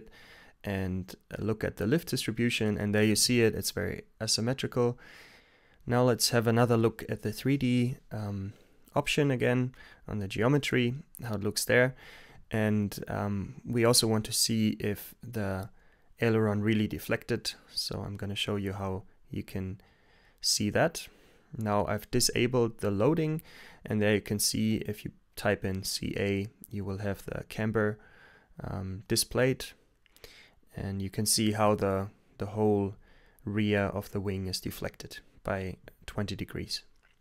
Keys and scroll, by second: 0.9 t, 1.6 Return, 9.3 p, 9.5 Return, 11.8 d, 11.9 Return, 13.7 Return, 14.0 g, 18.4-26.3 typing, 20.5 Return, 28.0-28.7 typing, 30.1 typing, 31.3 space, 33.8 Return, 34.6 Return.